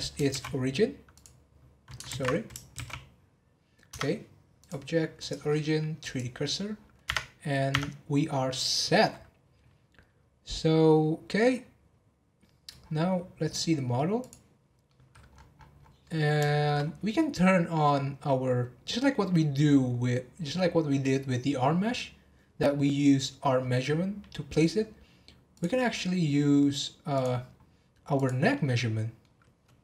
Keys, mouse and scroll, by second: 0.3 shift+s, 2.0 ctrl+z, 2.7 shift+s, 3.9 Tab, 4.6-6.7 drag, 6.7 scroll down 1, 7.0 Tab, 7.7 Tab, 11.1-12.8 scroll down 2, 13.0 scroll down 8, 14.2 click, 14.6 scroll down 1, 14.8-15.3 middle drag, 15.3-15.8 scroll up 10, 16.0-16.8 middle drag, 16.8 scroll up 1, 17.5 scroll up 9, 18.5-20.6 scroll up 1, 25.5 click, 25.9-26.6 scroll up 1, 27.1 click, 27.5-28.1 scroll up 1, 28.1 click, 28.5-29.8 middle drag.